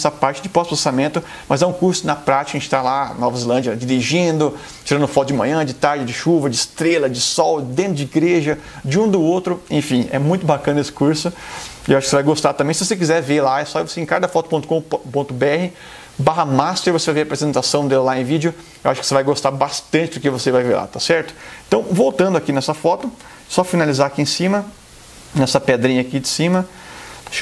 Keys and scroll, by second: 26.7 ].